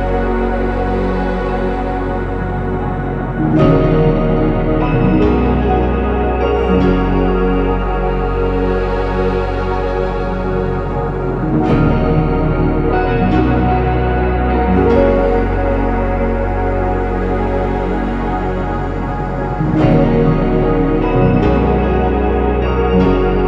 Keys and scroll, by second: 2.6 typing, 2.7 Return, 4.1 Escape, 8.0 typing, 8.3 Return, 14.1 0, 14.1 Return, 17.4 ctrl+c, 17.4 ctrl+v, 22.7 ctrl+z, 23.0 ctrl+z.